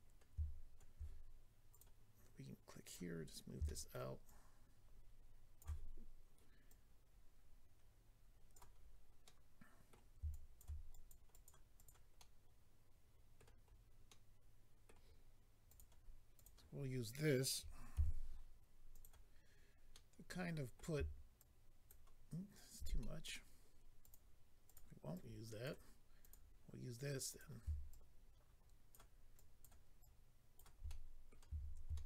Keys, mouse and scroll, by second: 0.0 scroll up 3, 1.8 click, 2.8 click, 3.1 scroll up 2, 3.6 shift+middle click, 4.2 shift+click, 6.7 click, 8.7-9.3 scroll down 2, 9.3 middle click, 9.3-9.8 scroll down 1, 10.3 shift+click, 10.9 click, 11.3 click, 11.8 double click, 12.2 middle click, 13.7-14.1 scroll down 2, 14.1 middle click, 15.6 click, 15.8 click, 16.3 click, 16.4 click, 18.9 click, 18.9 f, 19.0 click, 19.9 middle click, 21.4 ctrl+click, 23.0 middle click, 24.0 click, 24.1 click, 24.6 click, 24.8 click, 25.1 click, 26.2 click, 26.3 click, 27.3 click, 27.4 click, 27.9 ctrl+click, 29.3 ctrl+click, 30.0 ctrl+click, 30.8 middle click, 31.9 shift+middle click.